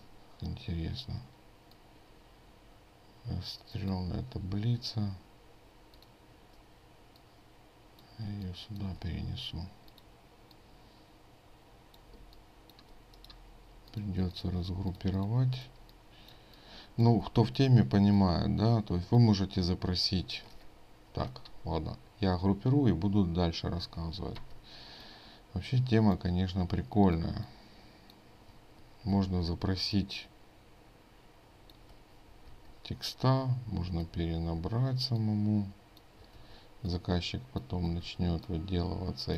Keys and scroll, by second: 14.7 ctrl+space, 24.4 ctrl+g, 29.2 ctrl+g, 32.5 ctrl+g, 34.5 ctrl+g, 36.4 ctrl+g, 38.0 ctrl+g.